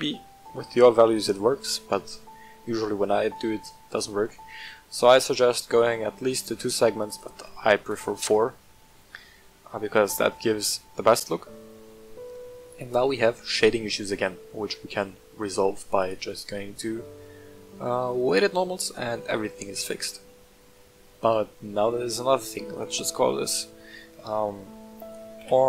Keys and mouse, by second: 5.6 click, 6.9 click, 7.1 click, 8.3-8.9 middle drag, 9.6-10.1 middle drag, 11.8-12.1 middle drag, 12.4 click, 12.9-14.3 middle drag, 16.0-18.3 drag, 23.0-25.6 drag.